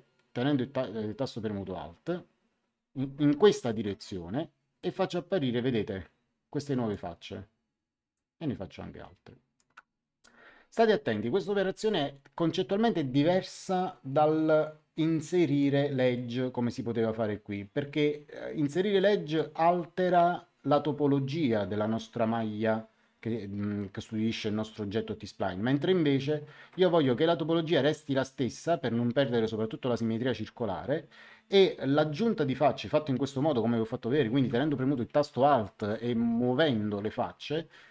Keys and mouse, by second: 4.7 click, 8.1 click, 15.4 click, 19.2 click.